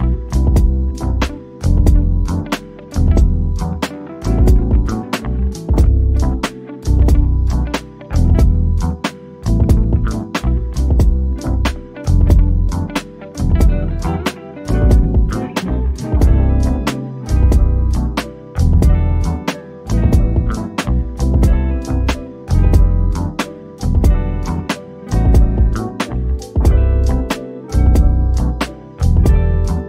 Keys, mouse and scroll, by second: 1.9 shift+click, 5.3 ctrl+shift+g, 6.5 click, 6.6 click, 7.7 shift+click, 8.8 shift+click, 9.7 click, 11.6 shift+click, 20.7 click.